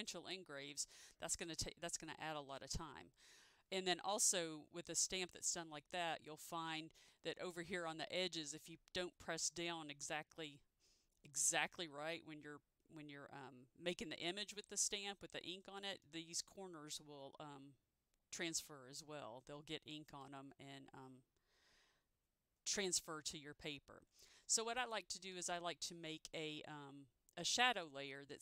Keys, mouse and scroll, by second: 25.4 ctrl+z.